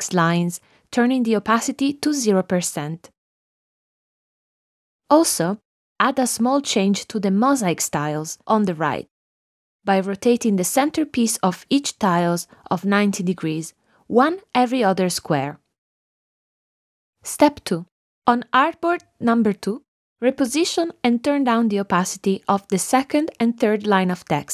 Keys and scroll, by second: 1.3 shift+Down.